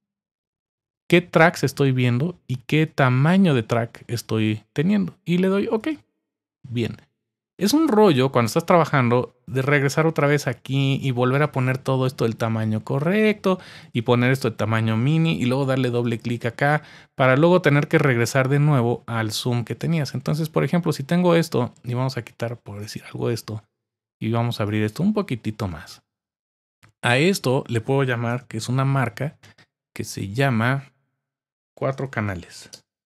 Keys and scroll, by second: 28.3 Return, 31.5-33.0 typing.